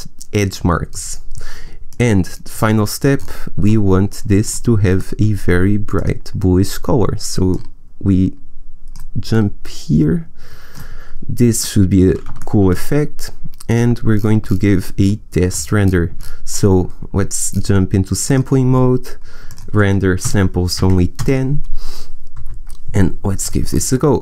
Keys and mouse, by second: 12.5 middle click, 13.6-15.3 drag, 22.3 KP_0.